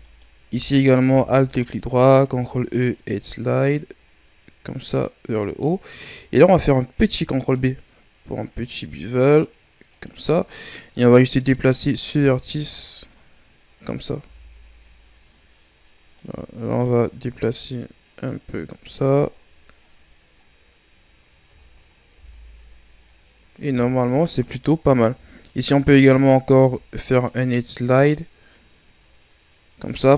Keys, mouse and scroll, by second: 0.0-2.2 alt+right drag, 2.2 ctrl+e, 6.9 ctrl+b, 10.2 scroll up 4, 10.9-12.2 right drag, 12.2 Tab, 12.5-13.1 scroll down 4, 13.1-13.8 scroll down 8, 13.8-14.2 scroll up 7, 14.2 Tab, 15.3-16.0 scroll up 3, 16.2 right click, 17.2-18.8 right drag, 18.8 Tab, 19.3-20.5 scroll down 8, 20.5 scroll down 3, 21.3 scroll down 1, 21.6-22.2 shift+scroll up 5, 22.2 Tab, 22.8-24.2 scroll up 1, 24.2-26.4 alt+right drag, 26.4 ctrl+e.